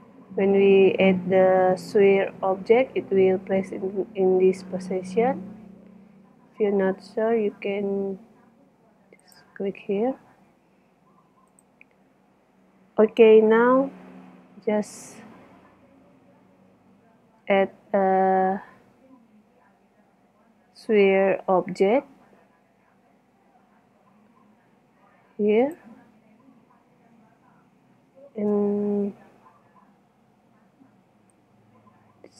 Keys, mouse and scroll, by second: 5.3 KP_7, 10.3 KP_1, 17.3 shift+a, 29.6 KP_7.